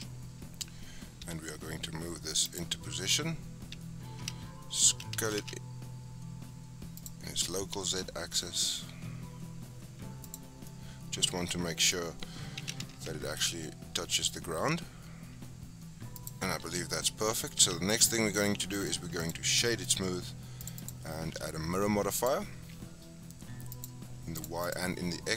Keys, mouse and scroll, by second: 0.3-1.2 scroll up 1, 1.2 g, 2.7-4.1 scroll down 5, 4.1 s, 7.7 g, 10.5 scroll down 1, 10.6-12.6 middle drag, 12.6 s, 16.5-17.0 scroll down 3, 16.6 Tab, 17.0 middle click, 17.5 Tab, 18.1-18.7 middle drag, 18.7-19.6 right drag, 19.6 shift+middle drag, 19.8-20.6 scroll up 5, 20.6 click, 22.2-23.8 drag, 24.4 click, 24.6 click.